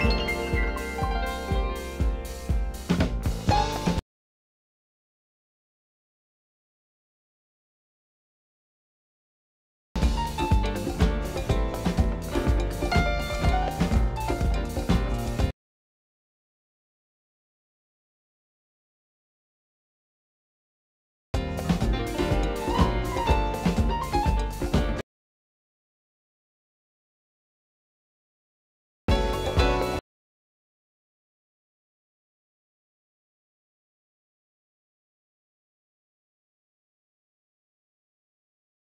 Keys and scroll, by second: 28.2 u, 30.1 u.